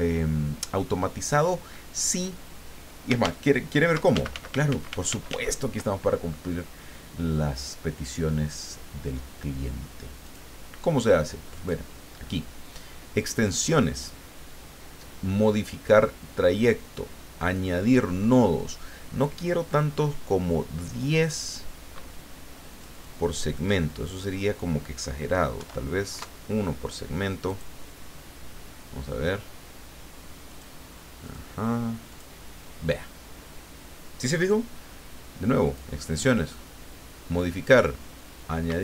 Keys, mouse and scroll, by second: 3.2 ctrl+z, 10.3 click, 11.6 click, 17.4 click, 22.7-23.8 drag, 23.9 click, 25.6 KP_1, 26.1 KP_Enter, 27.5 click, 30.5 click, 31.2 click, 32.0 click, 35.6 click, 38.7 Escape.